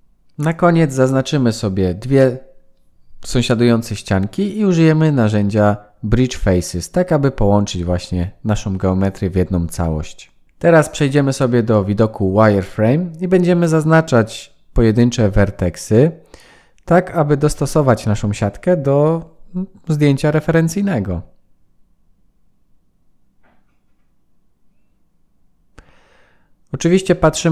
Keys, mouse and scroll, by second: 1.5 shift+click, 2.6 right click, 6.9 middle click, 8.6 KP_1, 9.6-10.4 scroll up 3, 10.4 shift+middle click, 11.0 1, 14.9 click, 16.2-16.8 scroll up 4, 17.3 click, 19.1 g, 21.4 click, 22.1 g, 24.6 click, 25.0 g, 26.9 click, 27.4 g.